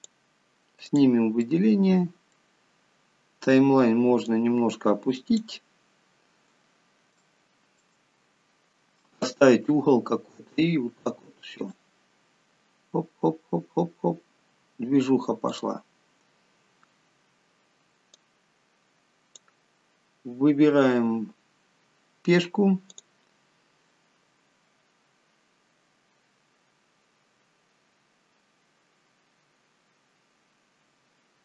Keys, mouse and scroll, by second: 1.3 click, 1.8 middle click, 2.8-3.5 scroll down 3, 4.6 click, 6.1 scroll up 5, 6.7 scroll down 1, 7.6 shift+middle click, 12.0 click, 15.9 click, 16.4-18.6 scroll down 5, 18.6 click, 21.6 scroll up 5, 23.3 click.